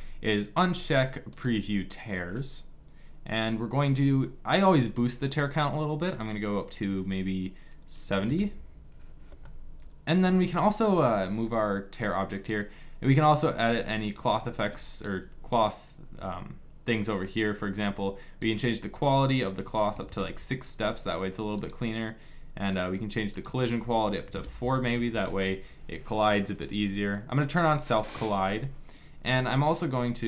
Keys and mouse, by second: 1.1-9.1 drag, 9.1-10.5 middle drag, 10.5-12.8 right drag, 11.1-14.3 drag, 12.8 s, 14.3 ctrl+z, 18.1-29.4 drag.